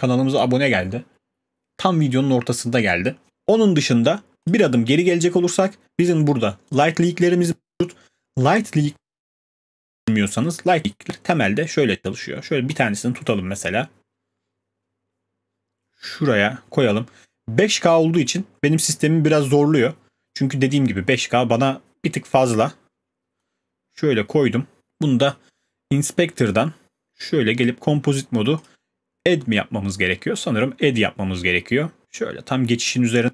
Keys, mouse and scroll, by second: 4.5 click, 6.9 click, 19.4 click, 24.8 click, 25.3 click, 27.1-27.6 scroll, 27.6 click.